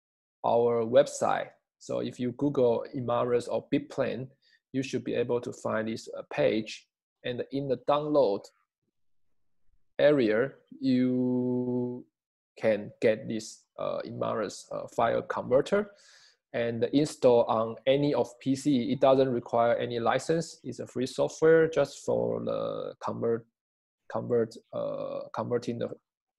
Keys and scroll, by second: 9.9 scroll.